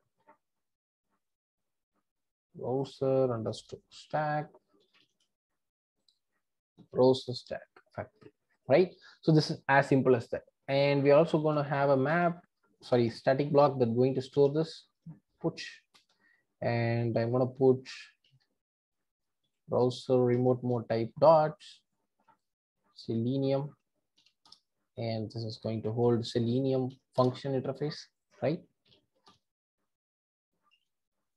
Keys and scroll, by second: 12.1 Return, 15.9 Return, 20.4 Return, 24.5 Return, 27.2 Return.